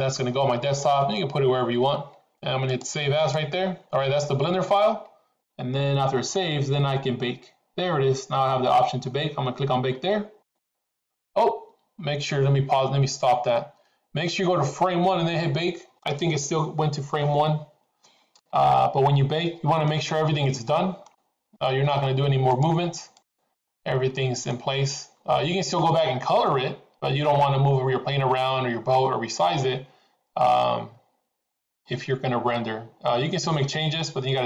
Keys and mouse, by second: 10.5-21.3 drag, 22.5 click, 23.1-23.7 drag, 24.0-24.7 middle drag.